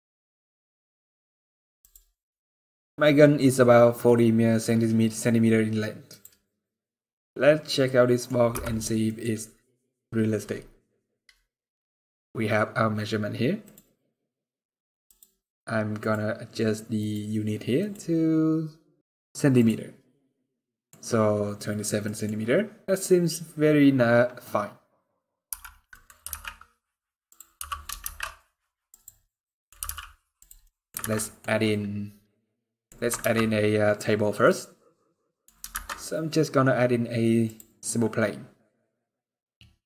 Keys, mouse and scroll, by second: 0.9-1.5 scroll up 3, 1.5 click, 1.9 middle click, 5.8 click, 6.2 middle click, 8.3 n, 8.8 middle click, 9.0-10.2 scroll up 17, 10.6 middle click, 13.4 click, 14.8 click, 19.0 click, 20.0 middle click, 21.8 middle click, 23.9 scroll down 2, 24.1 middle click, 25.2 n, 25.6 middle click, 25.9 r, 27.3 g, 29.0 middle click, 29.5 g, 30.4 middle click, 30.7 alt+a, 30.8 scroll down 1, 30.9 middle click, 31.2-32.0 scroll up 1, 32.5 middle click, 32.9 ctrl+s, 34.0 scroll down 1, 34.1 middle click, 35.4 shift+a, 37.9 scroll down 4, 38.0-38.8 scroll down 4, 38.4 middle click, 38.8 scroll up 3.